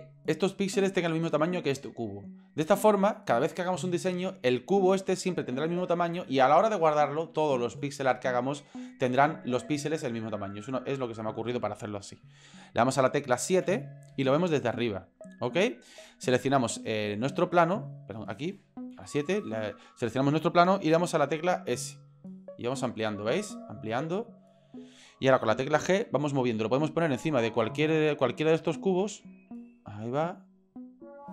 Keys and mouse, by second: 13.6 KP_7, 17.0 middle click, 17.9 right click, 18.9 KP_7, 21.3 s, 23.7 s, 25.9 g, 29.7 g.